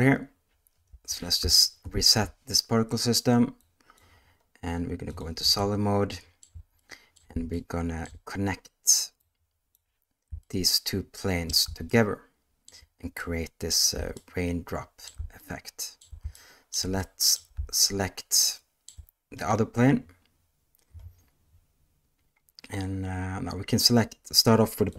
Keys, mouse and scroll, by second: 0.8 space, 1.8 shift+Left, 3.5 click, 5.0 click, 5.5-6.4 shift+middle drag, 6.7-7.1 middle drag, 7.5-8.0 shift+middle drag, 9.1 click, 10.4-11.6 shift+middle drag, 11.8-12.6 ctrl+middle drag, 13.2-13.6 middle drag, 14.1-15.0 shift+middle drag, 15.3-15.9 ctrl+middle drag, 16.3-16.6 shift+middle drag, 17.0 middle drag, 17.8-18.8 shift+middle drag, 24.8 click.